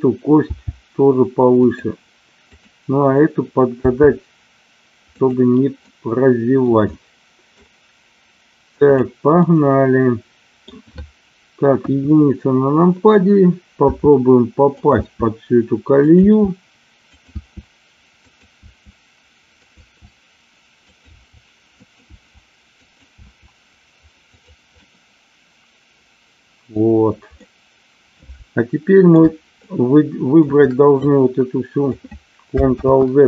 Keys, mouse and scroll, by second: 0.4 g, 3.8 g, 5.0 click, 5.8-6.7 scroll up 1, 6.9 middle click, 7.5-9.6 scroll down 1, 9.6 middle click, 11.6 KP_1, 13.8 e, 14.8 click, 14.9 e, 16.0 e, 17.0 click, 17.1 e, 18.2 click, 18.7 e, 19.7 click, 19.8 e, 20.9 click, 21.0 e, 21.6 click, 22.0 e, 22.8 click, 23.2 e, 24.3 click, 24.8-26.6 middle drag, 27.4-29.0 middle drag, 29.7 shift+middle click, 31.0 click, 32.8 ctrl+z.